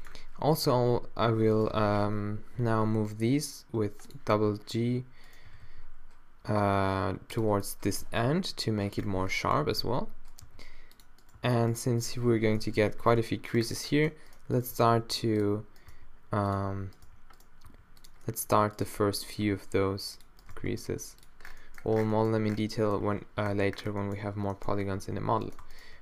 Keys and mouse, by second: 0.7 g, 1.7 o, 2.6 g, 5.5 g, 8.3 o, 9.6 g, 10.4 g, 11.4 g, 12.3 -, 12.9 middle click, 13.6 middle click, 14.3 middle click, 14.8 g, 15.4 middle click, 15.9 g, 17.0 g, 17.7 click, 17.7 g, 18.3 middle click, 19.1-20.4 middle drag, 19.5 g, 20.5 g, 21.4 middle click, 22.4 Tab, 25.0 Tab, 25.4 middle click.